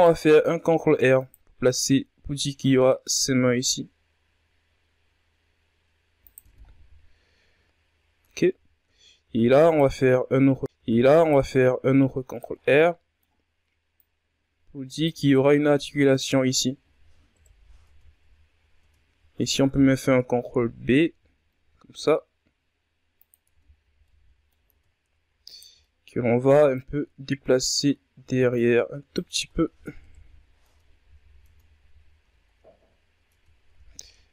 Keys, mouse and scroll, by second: 0.5 ctrl+r, 2.7 s, 7.5 Tab, 7.7-8.8 scroll down 4, 8.8-9.1 scroll up 2, 9.3 Tab, 10.2 ctrl+r, 12.1 scroll down 2, 12.3-13.5 middle drag, 13.5-14.8 drag, 14.8-16.8 middle drag, 16.8 KP_1, 17.4 Tab, 18.1 scroll up 2, 18.3 Tab, 19.5 ctrl+b, 22.9 Tab, 23.2-23.5 scroll down 2, 23.5-24.2 middle drag, 24.2 Tab, 25.0 alt+right click, 25.3 middle click, 26.3-28.8 drag, 28.8 Tab, 29.5 KP_1, 30.1 Tab, 30.9 Tab, 31.4-32.4 scroll down 6, 31.7 a, 32.4-32.8 scroll up 5, 32.8 Tab, 33.7-34.2 scroll up 1, 34.2 alt+right click.